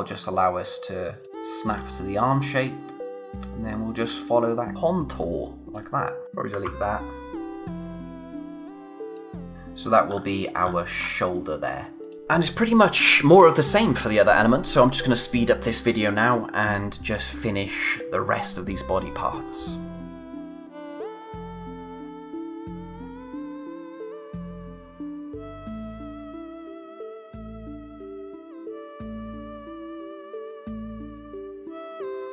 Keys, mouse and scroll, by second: 1.2 space, 1.3 click, 1.6 space, 1.9-2.8 scroll down 1, 4.7-5.2 scroll down 1, 5.2 space, 5.4 click, 5.7 space, 6.2 click, 12.0 click, 19.9 click, 20.0 scroll down 1, 20.2-20.7 scroll up 2, 20.3 space, 20.5 click, 20.7 click, 21.7 click, 21.9 scroll down 1, 22.1 click, 22.2 space, 22.2 click, 22.9 click, 22.9 scroll up 1, 23.0 click, 23.5 alt+Num_Lock, 23.8 click, 24.2 alt+shift+Num_Lock, 24.4 alt+shift+click, 24.5-25.2 scroll up 3, 24.6 click, 25.0 space, 25.2 space, 25.2 click, 25.9 click, 26.0 scroll up 1, 26.3 z, 26.4 space, 26.6 click, 26.7 scroll up 1, 26.8 click, 27.1 alt+click, 27.3 space, 27.3 click, 27.8 space, 28.0 click, 28.6-29.0 scroll down 2, 28.8 click, 29.0 space, 29.3 scroll up 1, 29.4 space, 29.8 click, 30.0 scroll up 1, 30.0 click, 32.2 click.